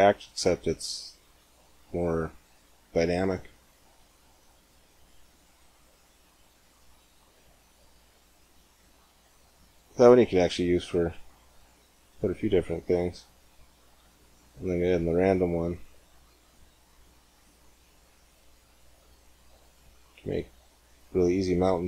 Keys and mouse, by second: 12.4-16.0 drag, 13.9 g.